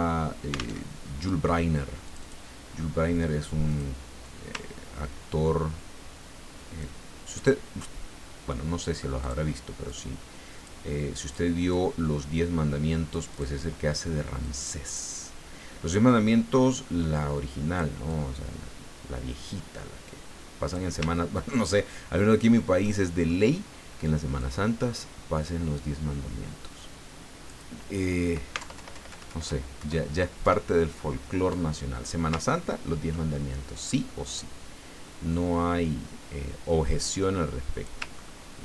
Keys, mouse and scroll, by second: 0.8 alt+Tab, 2.0 click, 3.7 click, 4.2-7.0 ctrl+drag, 9.2 click, 9.8-10.9 drag, 11.3 click, 11.7-13.3 drag, 14.4-17.9 drag, 18.1-20.9 drag, 21.1-21.7 ctrl+scroll up 4, 22.8 click, 24.4-27.7 drag, 28.6 alt+Left, 30.4 alt+Left, 32.5-33.1 ctrl+scroll down 4, 33.3 ctrl+click, 35.3-38.0 drag, 38.2-38.6 ctrl+scroll up 6.